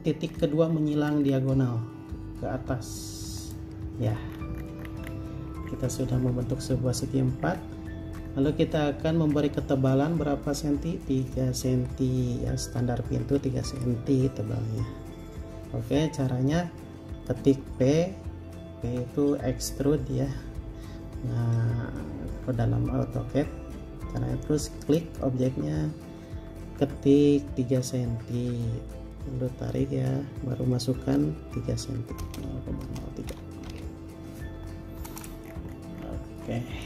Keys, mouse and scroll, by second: 0.5-0.9 scroll up 1, 4.2 scroll down 1, 5.6 r, 5.8-6.4 scroll up 1, 5.8 space, 7.2 r, 7.6 scroll up 1, 8.4-8.8 scroll down 1, 8.9-9.5 scroll up 1, 10.2 r, 17.8 p, 32.4-33.5 typing, 33.9 Return, 35.3 space, 35.6-36.8 scroll down 1.